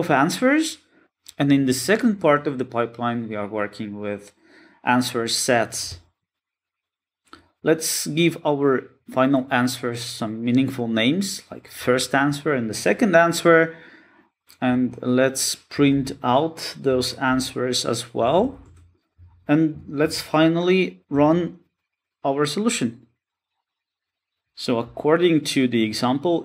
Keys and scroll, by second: 3.9 shift+F6, 8.4 shift+F6, 12.6 shift+F6, 15.1 Tab, 18.2 Return, 18.7 super+d, 18.9 alt+shift+Down, 20.2 alt+shift+Left, 21.9 Tab, 23.5 alt+Return.